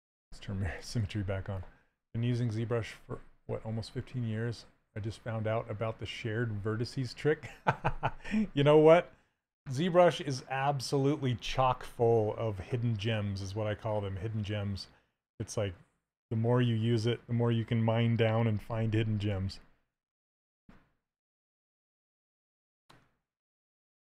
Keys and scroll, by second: 0.0 x.